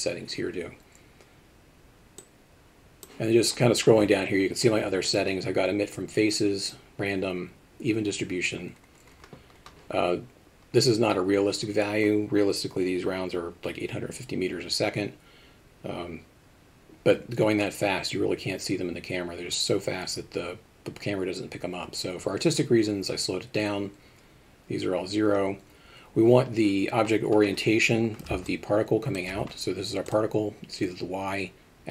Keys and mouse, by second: 2.3 click, 28.5 alt+shift+middle click, 30.1 click.